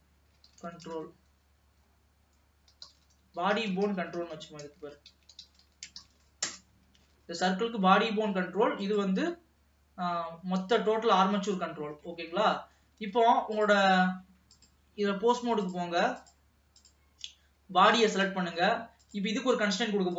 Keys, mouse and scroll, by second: 3.5 Left, 3.7 Left, 4.1 Left, 7.0 ctrl+s, 7.9 middle click, 8.8 click, 11.8 scroll down 1, 12.1-13.6 middle drag, 13.6 ctrl+s, 13.7 ctrl+click, 14.6 click, 15.7-17.9 drag, 18.1 ctrl+s, 19.1 click.